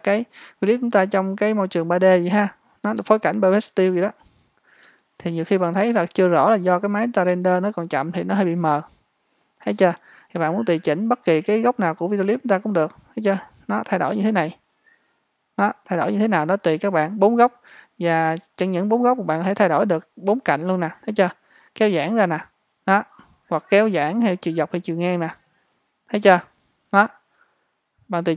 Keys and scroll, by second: 5.4 space, 6.4 space, 7.3-8.0 space, 9.8 space.